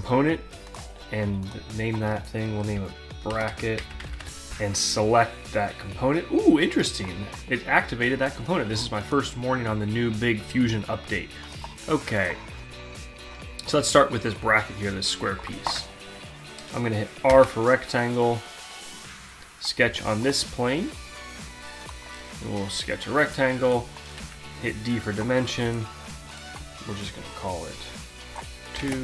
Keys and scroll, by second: 2.8-4.6 typing, 15.2 alt+Tab, 17.3 r, 23.8 d, 28.4 Return.